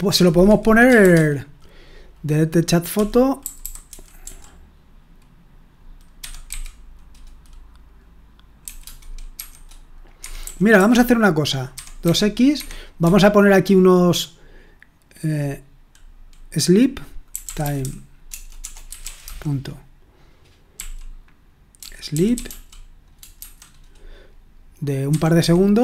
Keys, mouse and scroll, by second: 1.0 shift+g, 2.7-4.7 typing, 5.9-6.9 typing, 8.6-13.5 typing, 12.6 Escape, 17.3-19.2 typing, 20.7 typing, 21.8-23.3 typing, 25.0-25.8 typing, 25.3 Escape.